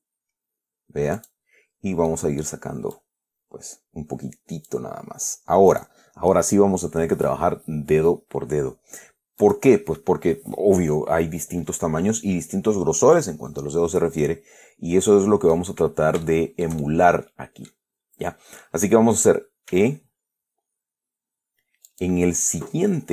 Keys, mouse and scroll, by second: 1.5 click, 2.4 middle click, 3.2-5.2 drag, 5.4 scroll up 1, 6.0 right click, 9.7 right click, 14.5-16.0 middle drag, 16.5-18.2 shift+middle drag, 20.0 e, 22.2 click.